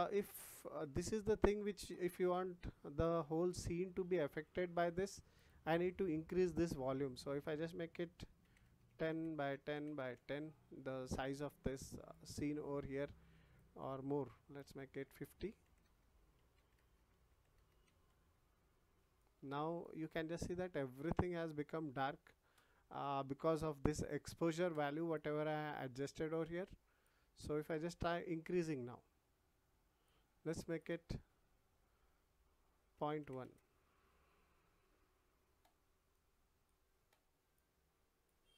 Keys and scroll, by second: 15.8 0.